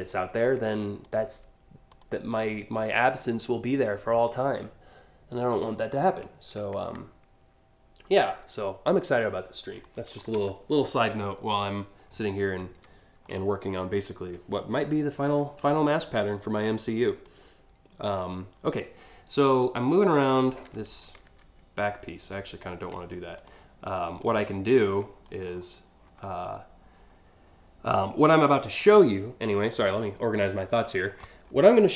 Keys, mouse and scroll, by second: 0.7 shift+click, 1.6 shift+click, 2.6-5.1 drag, 7.8-9.5 drag, 9.8 scroll down 1, 10.0-10.4 scroll up 1, 10.5 alt+scroll down 1, 11.4 alt+scroll down 1, 11.6-12.4 alt+scroll up 2, 12.5-13.4 scroll up 3, 14.1 scroll up 2, 14.7 scroll up 1, 15.4 alt+scroll down 2, 16.9-17.8 drag, 19.2-19.8 drag, 20.3 ctrl+z, 20.9 ctrl+alt+z, 21.4 ctrl+alt+z, 21.9 ctrl+alt+z, 23.0 click, 23.8-24.9 drag, 25.1 scroll down 1, 25.7 scroll down 2.